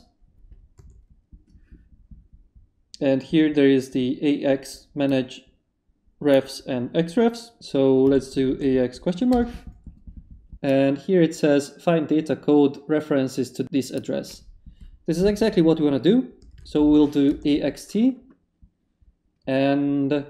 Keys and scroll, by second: 0.0 Return, 0.8 a, 7.8-9.0 typing, 9.3 shift+Return, 16.2-17.3 typing.